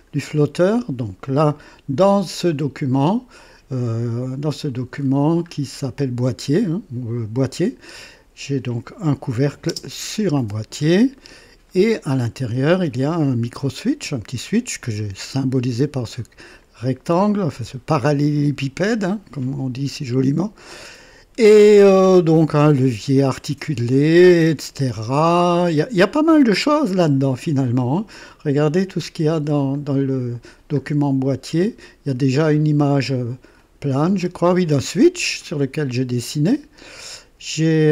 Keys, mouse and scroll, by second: 2.5-2.8 scroll up 2, 3.8-4.2 scroll up 2, 5.0-5.7 scroll up 4, 9.2 click, 9.7 space, 10.4-11.0 scroll up 2, 11.2 right click, 12.0-13.1 drag, 13.4-14.7 drag, 16.2-22.2 drag, 23.9-26.3 drag, 26.9 scroll up 1, 29.0 scroll up 1, 29.5 scroll down 1, 30.8 scroll up 1, 32.9 click, 33.6 click, 34.1 space, 34.1 space, 35.4-36.5 drag, 37.7 space.